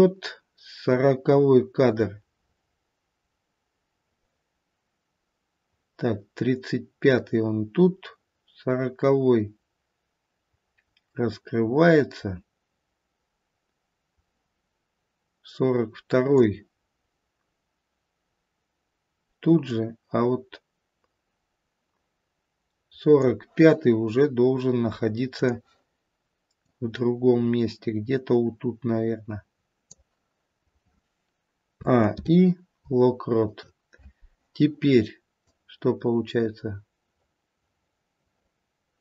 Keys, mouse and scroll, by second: 19.7 click, 25.3 click, 26.5 click, 31.6 a, 32.0 i, 35.4 click.